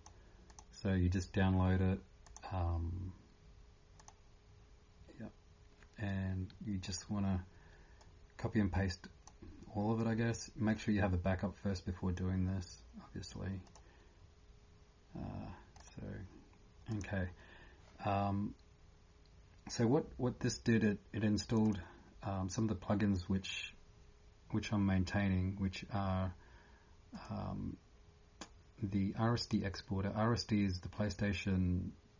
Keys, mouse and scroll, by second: 5.9 typing, 9.4 typing, 16.7 scroll down 10.